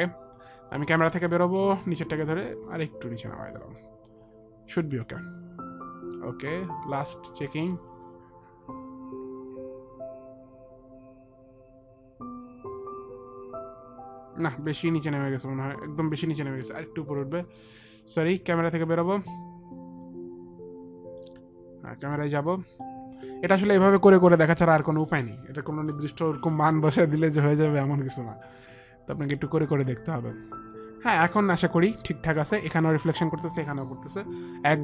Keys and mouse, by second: 1.3 click, 2.9 click, 5.2 click, 16.9 middle click, 17.8 middle click, 18.8 click, 18.8 middle click, 20.3 click, 20.3 middle click, 21.1 click.